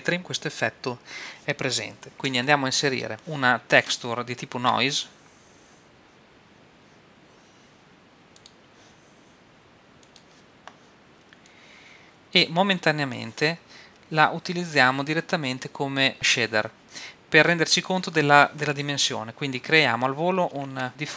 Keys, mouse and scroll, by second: 2.7 middle click, 4.5 shift+a, 10.1-16.0 drag, 17.4-19.3 drag, 20.6 shift+a.